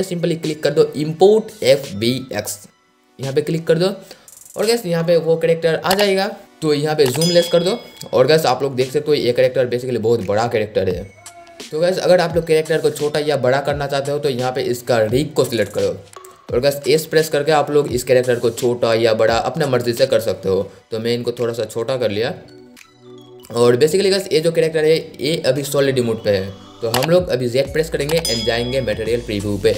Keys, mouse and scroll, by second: 10.6 scroll up 1, 11.6 click, 16.9 s, 20.3 click, 20.9 scroll up 1, 21.9-24.9 drag, 27.9 z, 29.5-29.7 drag.